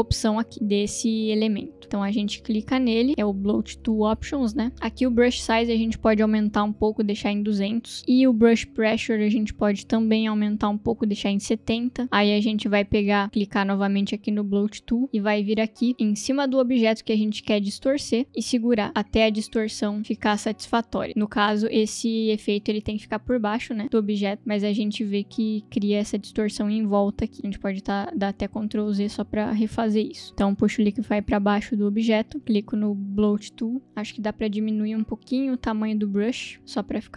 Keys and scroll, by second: 7.2 0, 7.6 Return, 11.1-11.9 typing, 27.4 ctrl+z, 28.5 ctrl+z.